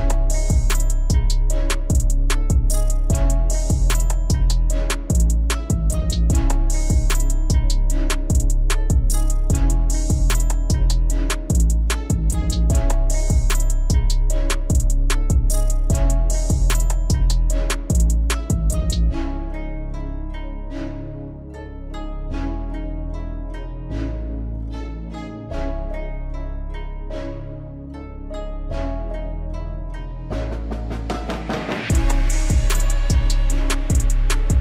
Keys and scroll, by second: 1.4 alt+w, 8.8 alt+w.